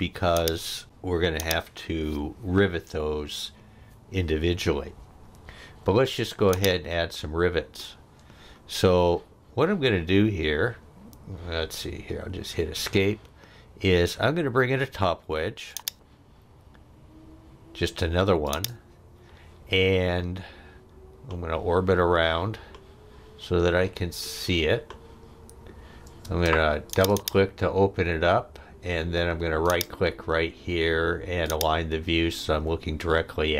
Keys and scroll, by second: 12.3 Escape, 26.3 space.